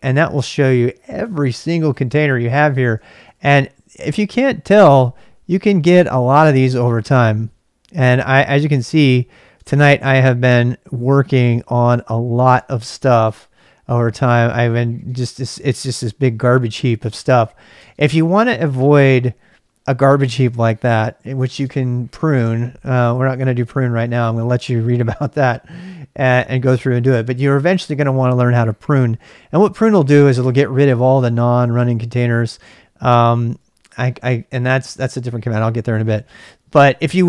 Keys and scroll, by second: 1.9-4.2 typing, 4.3 Return, 6.3 typing, 9.6 space, 11.1 space, 12.5 space, 13.4 space, 15.0 space, 17.0 space, 17.8 space, 18.7 space, 20.4 space, 21.7 space, 32.7 space, 33.1 space, 33.3 q, 36.4 space, 36.4 q.